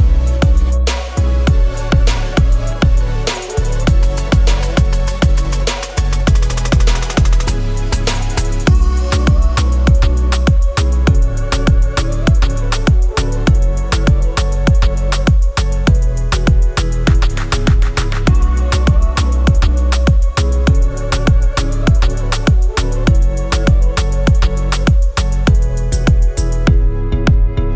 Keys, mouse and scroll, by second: 1.7 shift+click, 2.4 right click, 5.1 double click, 15.7 ctrl+-, 15.8 ctrl+-, 16.5-16.9 scroll, 17.3-17.7 scroll down 1, 18.1-19.3 scroll, 19.3-20.6 scroll, 20.7 typing, 22.8-25.8 typing.